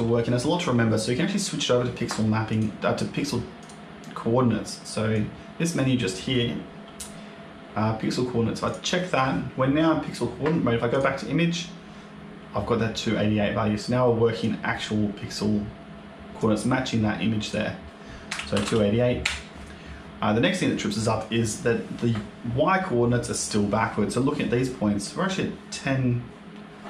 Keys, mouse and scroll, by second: 2.4 click, 3.5 click, 5.0 click, 8.5 click, 10.8 click, 14.3 click, 18.5 KP_8, 20.5 click, 22.4 scroll down 1, 23.1 middle click.